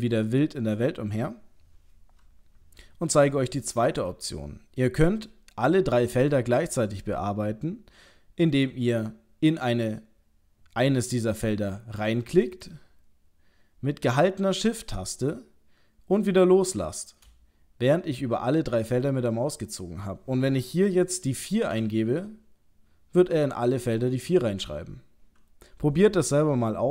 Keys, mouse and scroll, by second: 12.7 shift+click.